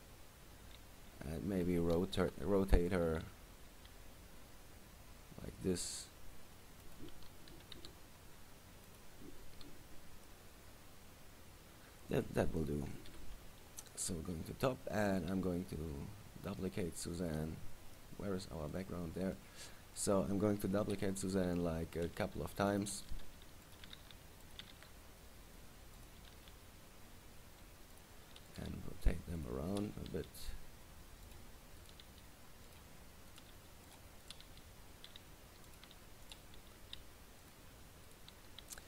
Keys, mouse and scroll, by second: 0.0 middle click, 2.4 KP_3, 3.2 r, 7.1 click, 7.7 g, 9.1 click, 10.4 middle click, 13.3 KP_7, 13.9-14.5 scroll down 2, 14.5 scroll down 7, 14.8-15.3 scroll up 8, 15.8-16.3 scroll down 3, 17.5 right click, 18.9 middle click, 20.1 right click, 21.0 KP_7, 22.2 shift+d, 23.0 click, 23.3 shift+d, 23.9 click, 24.1 shift+d, 24.7 click, 24.9 shift+d, 26.2 click, 26.5 shift+d, 28.2 click, 28.6 right click, 28.9 r, 29.6 click, 29.9 right click, 30.3 r, 31.5 click, 32.0 right click, 32.2 r, 32.9 click, 33.5 right click, 33.7 r, 34.1 click, 34.4 right click, 34.6 r, 35.9 click, 36.4 right click, 36.7 r, 37.7 click, 38.2 right click, 38.5 g.